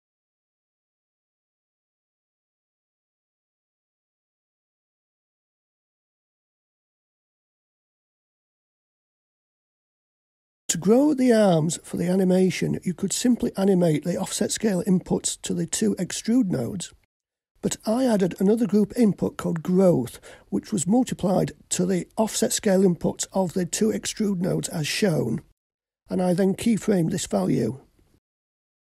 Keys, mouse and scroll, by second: 0.1 a, 2.4 click, 3.5-5.5 scroll down 5, 5.9 click, 8.1-8.9 scroll up 1, 8.9-9.8 middle drag, 8.9-9.8 scroll up 2, 10.6 click, 14.7 click, 16.3 shift+click.